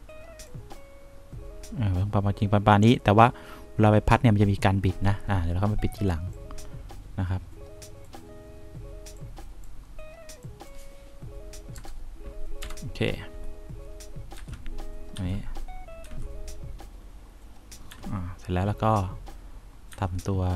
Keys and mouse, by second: 0.8-3.5 drag, 6.7-8.2 drag, 12.1 0, 12.9 Return, 14.7 F1, 15.5 F2, 16.3 F1, 18.2 F3, 20.3 F4.